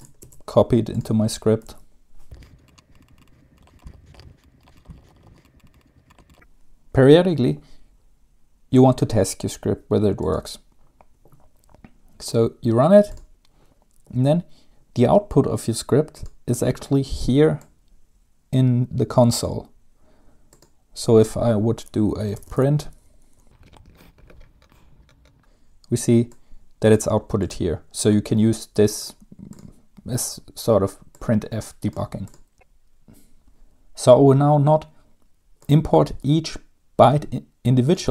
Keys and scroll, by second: 0.3 ctrl+c, 1.8 ctrl+v, 2.4 Return, 3.7 ctrl+c, 3.8 ctrl+v, 3.9-5.3 typing, 4.7 ctrl+c, 4.9 ctrl+v, 5.0 Left, 5.1 Home, 5.3 End, 5.3 Return, 22.0-24.4 typing.